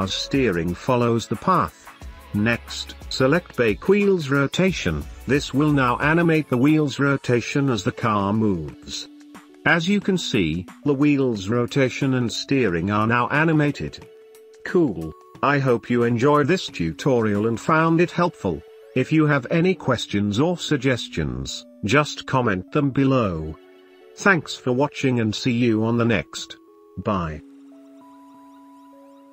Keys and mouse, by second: 0.0 middle click, 1.6 space, 3.6 space, 4.4-5.4 drag, 6.7 click, 7.0 space, 8.2 shift+middle drag, 9.9 space, 10.1-10.7 middle drag, 11.0 middle drag, 11.3 click, 11.4 middle click, 12.2 space, 15.2 space, 15.8 shift+middle click, 20.3-22.2 middle drag, 24.3-25.0 shift+middle drag, 26.3-26.8 shift+middle drag.